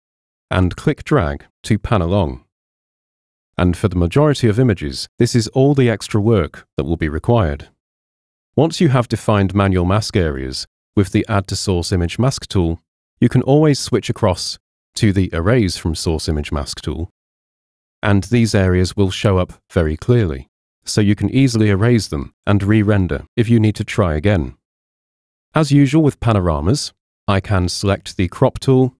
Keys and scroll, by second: 8.4 super+0, 25.4 super+0, 27.1 c.